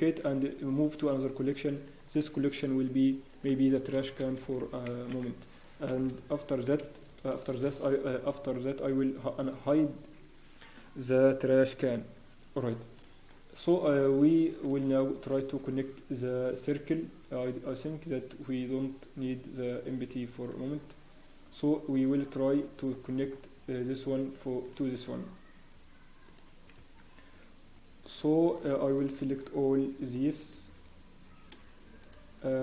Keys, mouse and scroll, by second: 0.2 m, 14.9 shift+click, 15.6 Tab, 19.2 click, 20.7-21.1 scroll down 1, 22.1 click, 22.8-23.3 scroll up 1, 24.6 click, 24.9 scroll down 1, 25.2-25.9 scroll up 7, 26.2 click, 26.6 scroll down 4, 26.8 Tab, 26.8-27.1 scroll up 4, 28.5 click, 28.5-29.3 scroll down 3, 29.3 scroll down 1, 30.1-30.6 scroll up 4.